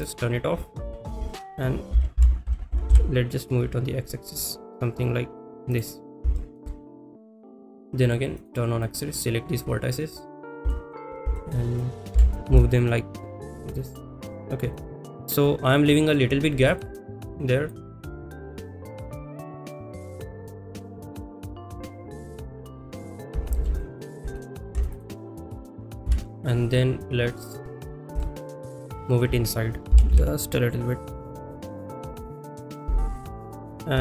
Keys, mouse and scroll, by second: 0.6 shift+middle click, 1.3 shift+middle click, 5.0 x, 5.7 click, 6.5 shift+middle click, 7.5 click, 8.4 click, 8.8 click, 10.4 click, 10.7 shift+middle click, 11.3 shift+middle click, 13.9 g, 13.9 x, 14.7 click, 16.8 click, 17.4 drag, 18.4 shift+middle click, 19.2 g, 19.2 z, 19.4 shift+middle click, 19.8 click, 19.9 click, 20.3 shift+middle click, 20.5 shift+middle click, 21.3 g, 21.3 z, 21.7 click, 22.2 middle click, 24.0 ctrl+a, 24.9 ctrl+s, 24.9 click, 25.4 click, 26.1 KP_7, 27.4 click, 28.2 shift+middle drag, 30.0 g, 32.2 click, 32.2 y, 33.2-33.5 shift+middle drag.